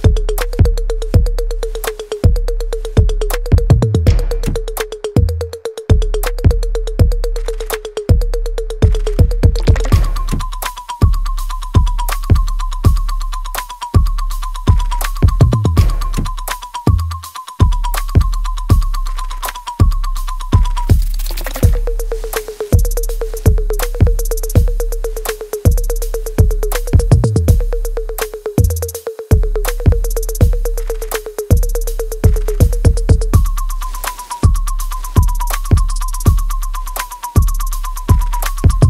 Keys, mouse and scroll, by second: 0.2 alt+click, 1.1 alt+right click, 2.0-5.4 alt+drag, 5.7 alt+click, 6.6 alt+middle click, 7.0 right click, 7.1 alt+right click, 7.4 click, 7.5 alt+click, 8.6 ctrl+s, 9.3 alt+click, 9.8 alt+middle click, 10.3 alt+click, 11.0 click, 11.2 alt+middle click, 11.8 alt+click, 12.2 alt+right click, 12.6 alt+middle click, 13.4 click, 13.8 alt+right click, 14.6 click, 15.0 alt+middle click, 15.4 alt+right click, 15.8 click, 16.3 alt+right click, 16.9-18.3 alt+drag, 18.3-20.8 alt+right drag, 20.8 click, 21.8 click, 22.1-23.5 alt+right drag, 23.5 click, 24.1 alt+right click, 24.8 alt+click, 25.6 alt+right click, 26.3 alt+click, 26.8 alt+right click, 27.8-29.2 right drag, 29.2-32.7 alt+right drag, 32.7 alt+middle click, 33.7-37.8 alt+right drag.